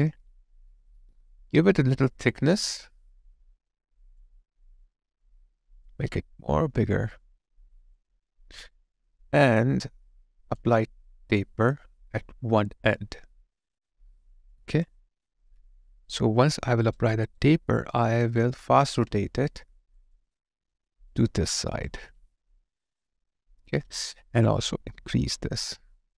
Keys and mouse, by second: 16.9 alt+right click, 17.5 alt+click, 21.8 alt+click.